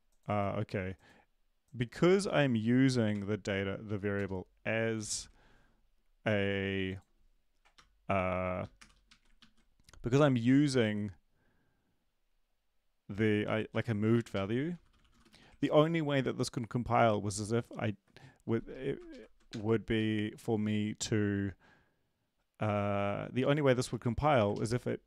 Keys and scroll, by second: 3.1 ctrl+l, 3.8 Up, 4.3 Return, 5.1 ctrl+`, 9.4 Right, 9.4 ctrl+s, 9.4 typing, 14.1 Up, 14.1-15.6 typing, 14.3 Left, 19.1 Left, 19.5 BackSpace, 19.9 Right, 24.5 Down, 24.5 Right, 24.5 ctrl+shift+Left.